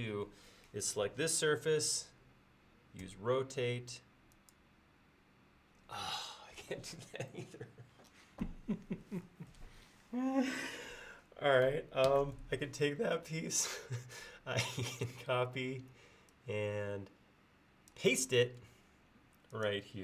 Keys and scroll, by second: 0.3 space, 3.1 q, 12.1 Escape.